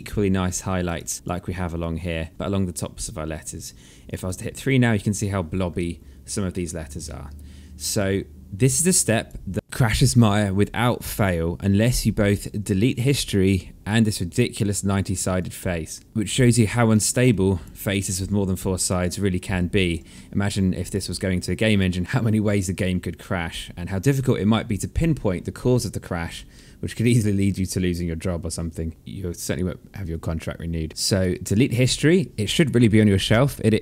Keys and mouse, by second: 0.0 right click, 0.5 click, 0.7 alt+click, 2.8 click, 3.8 3, 5.3 alt+middle click, 7.2 1, 7.5 alt+middle click, 8.6 alt+click, 10.2 alt+click, 11.9 alt+middle click, 13.4 right click, 14.9 click, 16.1 alt+click, 16.2 alt+middle click, 16.6 alt+click, 17.2 alt+middle click, 18.7 alt+click, 19.5 alt+middle click, 19.9 alt+click, 21.0 click, 25.9 alt+middle click, 30.9 alt+click, 32.0 click.